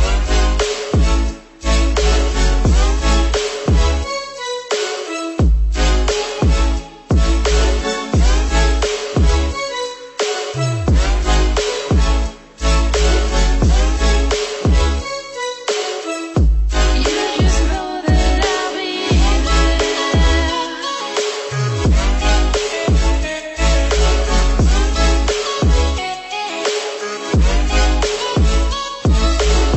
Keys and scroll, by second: 2.4 ctrl+-, 22.7 ctrl+0.